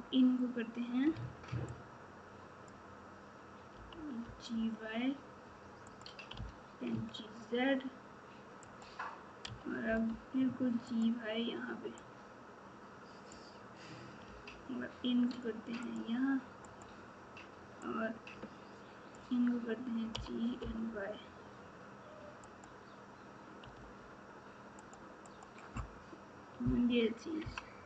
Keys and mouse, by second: 1.1 alt+z, 3.7 g, 12.2-15.8 drag, 23.7 r, 25.2 click.